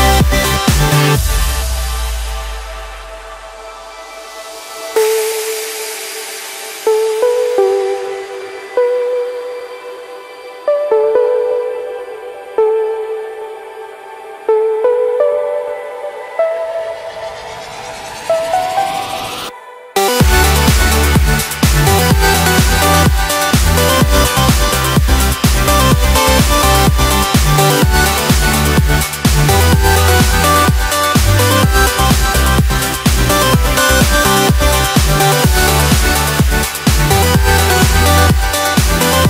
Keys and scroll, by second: 2.0 alt+7, 2.4 a, 3.2 Escape, 3.6 Return, 15.0 alt+7, 15.2 alt+a, 15.4 Escape, 30.2 ctrl+d, 33.4 Return, 33.6 Escape, 34.5 Return, 34.9 Escape, 38.1 Return.